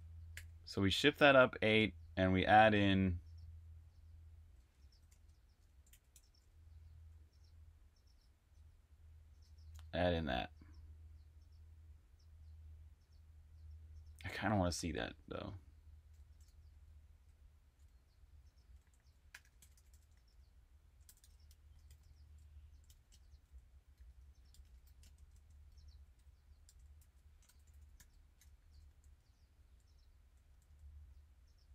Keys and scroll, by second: 0.0-0.2 typing, 4.6-6.8 typing, 9.2 Escape, 9.8 k, 13.7-14.9 typing, 16.6 Escape, 16.8-31.5 typing.